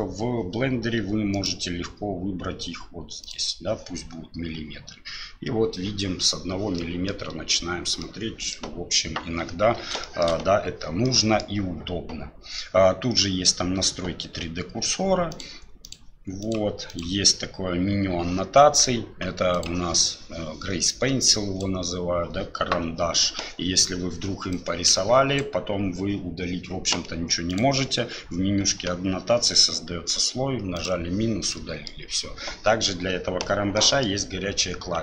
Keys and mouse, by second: 1.3-3.4 drag, 6.8 middle click, 8.0 middle click, 10.0 shift+click, 11.0 click, 15.4 click, 15.9 click, 16.4 click, 16.9 click, 19.5 click, 20.1-21.6 drag, 24.5 click, 27.5 click, 30.7 click, 31.5 middle click, 33.8 middle click.